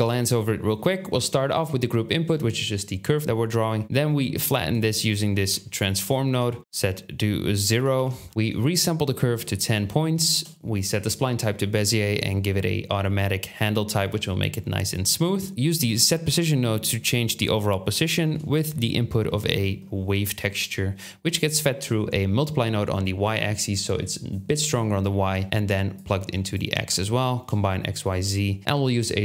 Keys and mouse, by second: 3.8-4.6 drag, 4.6 middle click, 4.7-7.7 drag, 5.9 ctrl+h, 7.9 ctrl+h, 9.6 shift+middle click, 9.8 shift+click, 10.0 shift+middle click, 10.0 shift+middle click, 10.2 shift+click, 14.3-15.5 shift+drag, 17.2 KP_7, 18.5-19.7 shift+middle drag, 19.7-26.8 shift+drag, 26.8 shift+middle click.